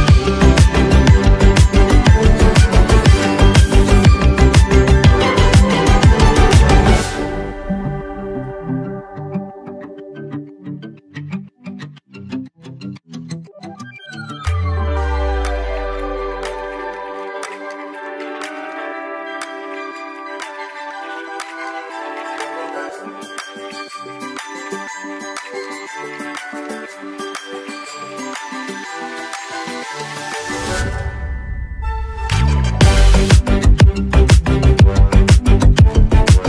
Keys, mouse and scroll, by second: 0.5 space, 1.5 space, 1.6 click, 2.1 space, 2.5 click, 3.2-6.4 drag, 6.4 alt+scroll down 1, 7.5 space, 7.6-15.6 drag, 15.6-16.1 alt+scroll down 1, 16.5 alt+scroll up 1, 19.1-19.6 alt+scroll down 1, 25.2 click, 27.8 ctrl+s, 29.9 click, 35.5 click, 35.5 click.